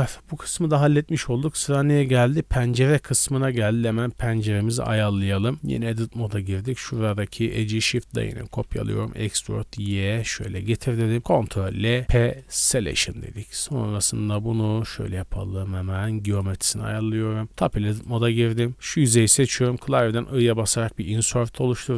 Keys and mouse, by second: 4.9 middle click, 5.0-6.3 drag, 5.5 Tab, 5.8 2, 6.5 middle click, 7.2 shift+click, 7.5 shift+d, 8.1 middle click, 8.3 e, 11.2 ctrl+l, 12.0 p, 13.1 Tab, 13.4 click, 13.5-17.9 middle drag, 13.8 drag, 14.8 w, 17.4 Tab, 18.0-19.0 middle drag, 18.6 3, 20.0 i.